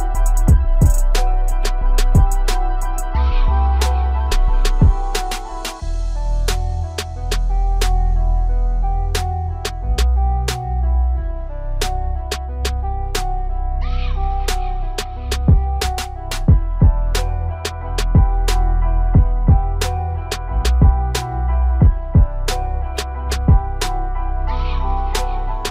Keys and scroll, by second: 4.7 shift+m.